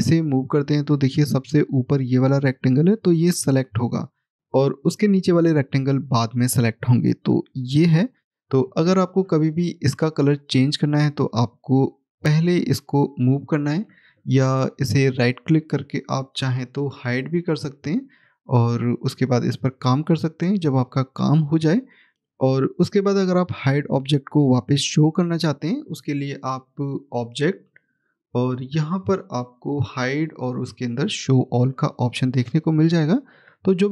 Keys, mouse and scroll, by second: 9.4 click, 14.8 right click, 17.3 click, 27.4 click, 31.8 click.